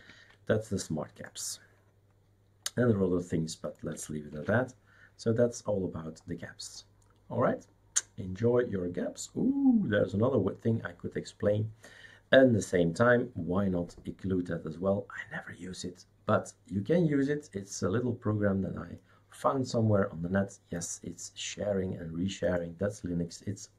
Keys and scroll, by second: 4.3 shift+super+q.